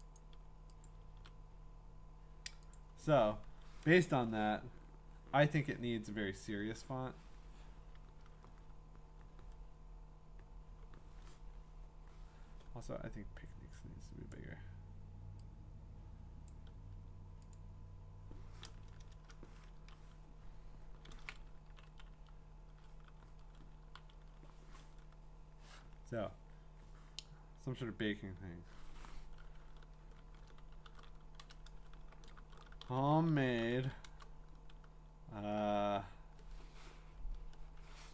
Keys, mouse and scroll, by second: 0.2 click, 0.8 click, 1.1 ctrl+v, 2.7 click, 4.3 Return, 5.7 click, 14.3 click, 16.5 click, 17.5 click, 19.7 Down, 21.6 Down, 21.9 Down, 22.1 Down, 22.7 Up, 23.8 Up, 26.7 Up, 30.4 shift+Up, 30.9-34.3 typing.